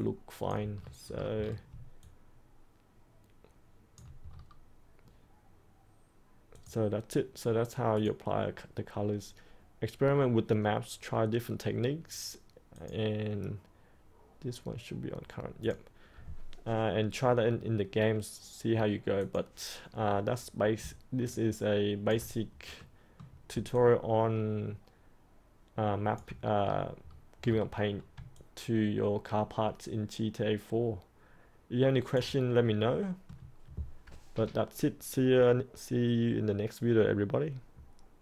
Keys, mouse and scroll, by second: 0.7 scroll up 1, 1.0 scroll down 1, 2.0-3.9 alt+drag, 4.2-4.7 scroll up 1, 6.5 click, 21.2 alt+click, 22.7 middle click, 23.7 alt+click, 26.6 scroll up 1, 27.3-28.1 scroll down 1, 28.3-32.6 alt+drag, 32.6-33.9 middle drag.